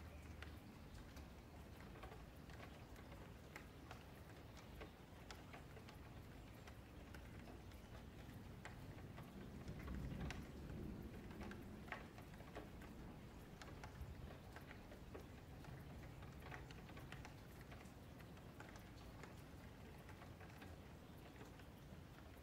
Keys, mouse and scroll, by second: 0.0 scroll down 5, 0.2 middle click, 1.0 scroll up 4, 1.2-3.2 middle drag, 3.2-3.5 scroll down 5, 3.5 middle click, 4.1 scroll down 4, 4.4 a, 4.6 a, 5.1-6.2 middle drag, 6.2 F4, 6.5-8.1 middle drag, 8.1 ctrl+s, 14.4-14.8 middle drag, 14.8-15.2 scroll up 6, 15.2 F4, 15.5-16.5 middle drag, 16.5 ctrl+s, 16.6 scroll up 4, 16.8-17.6 middle drag, 17.6-18.0 scroll up 3, 18.0-18.6 shift+middle drag, 18.6-19.8 scroll down 12, 19.8-22.4 middle drag.